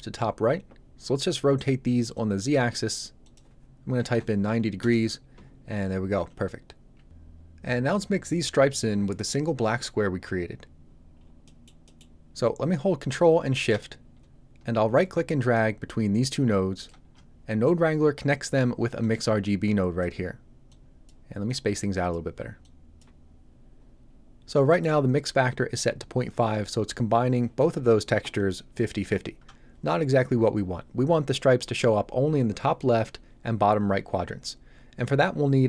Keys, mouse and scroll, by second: 2.1 click, 3.9 KP_9, 4.1 KP_0, 4.7 Return, 10.8-11.1 scroll down 1, 11.4 middle click, 14.9 ctrl+shift+right click, 19.4 click, 24.0 scroll up 1, 24.6 middle click.